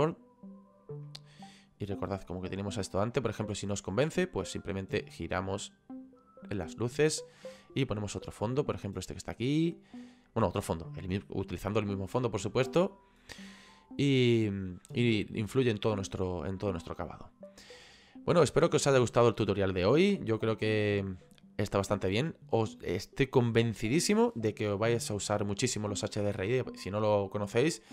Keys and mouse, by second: 1.1 middle click, 3.2 middle click, 4.6 click, 19.4 click, 21.9 click.